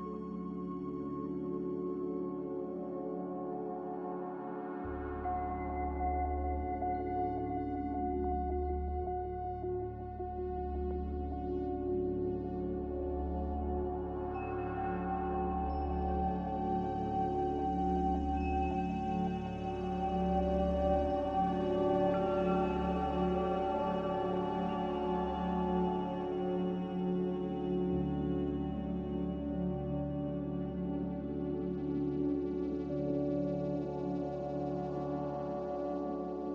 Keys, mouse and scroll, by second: 6.5 b, 7.4 Delete, 9.9 Delete, 11.0 m, 23.5 b, 33.2 z, 34.2 c.